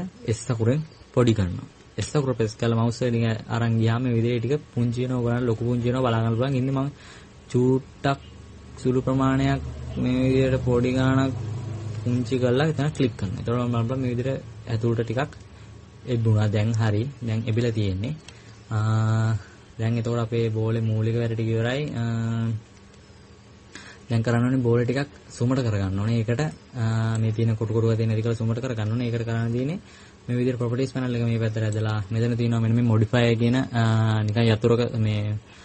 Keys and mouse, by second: 14.1 middle click, 17.8-20.1 middle drag, 19.0 Tab, 31.5-35.6 drag.